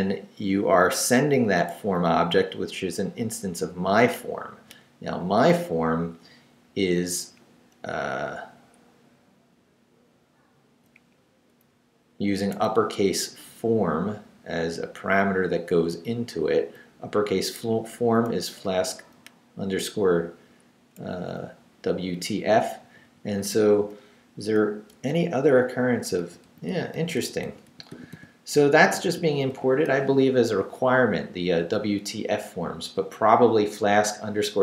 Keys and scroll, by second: 1.9 Right, 3.6 Left, 4.7 Up, 6.9 Up, 7.8 Left, 10.9 Up, 11.7 Right, 13.1 Left, 13.8 Right, 16.7 Up, 17.9 Down, 18.6 Up, 19.2 Left, 20.5 Right, 22.2 Down, 22.8 Left, 23.6 shift+Left, 25.1 shift+8.